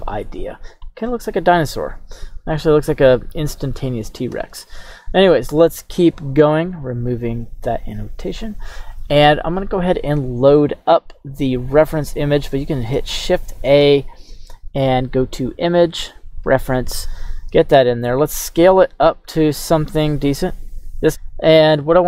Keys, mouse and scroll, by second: 4.4 q, 7.8 click, 12.1 right click, 12.9 shift+a, 17.2 shift+a, 17.9 s, 18.9 click, 20.1-20.6 scroll down 2, 20.6 s, 21.1 right click, 21.1 s.